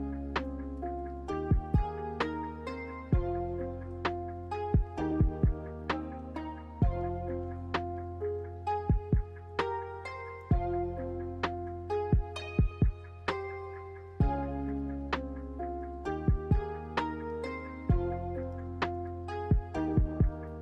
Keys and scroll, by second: 1.7-2.5 typing, 9.3 ctrl+c, 9.5 ctrl+v, 10.3 ctrl+c, 10.9 m, 11.6 n, 15.0 m, 16.9 a, 19.3-20.2 typing.